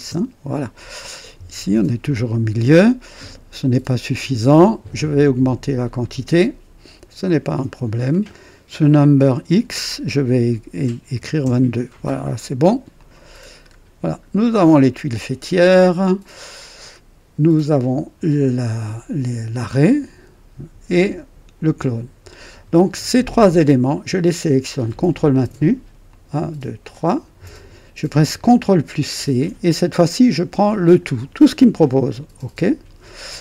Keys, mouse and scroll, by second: 0.0 KP_Enter, 0.0 typing, 3.1-3.7 right drag, 3.2-3.5 typing, 3.7-4.1 scroll down 1, 5.8-6.5 typing, 5.9-8.2 drag, 8.7 click, 10.9-11.3 typing, 11.3 Return, 12.9 click, 13.6 scroll up 1, 14.4-14.8 scroll down 1, 24.2 click, 26.0 ctrl+click, 26.8 ctrl+click, 29.0 ctrl+c, 29.1 ctrl+c, 32.0 click.